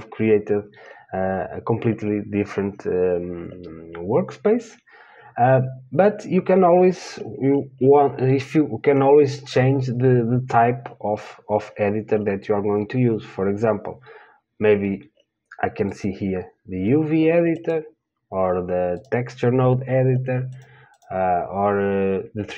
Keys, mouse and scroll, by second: 19.3-22.5 drag.